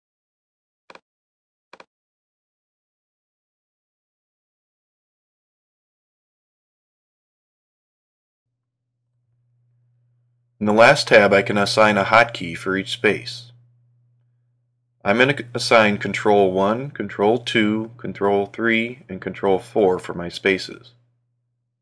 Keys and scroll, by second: 5.3 super+Left, 6.3 super+Up, 15.0 ctrl+1, 18.3 ctrl+2, 21.3 ctrl+2.